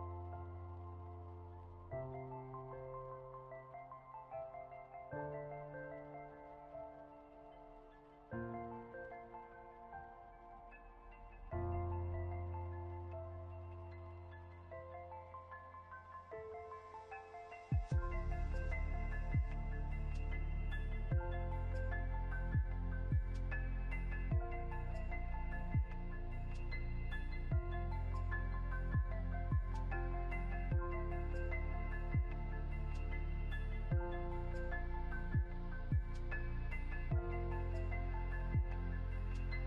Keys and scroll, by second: 20.2 ctrl+z, 24.0 ctrl+2.